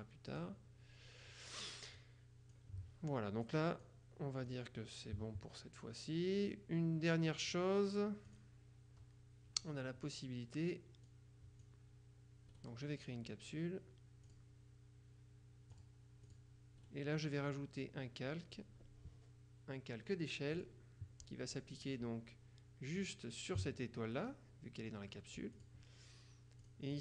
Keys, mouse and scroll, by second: 0.4 click, 2.1 click, 3.6 click, 4.6 click, 8.4 click, 11.2 click, 12.6 right click, 14.4 click, 15.8 click, 16.9-20.6 right drag, 20.6 click, 23.0 click, 25.6 click, 26.7 click.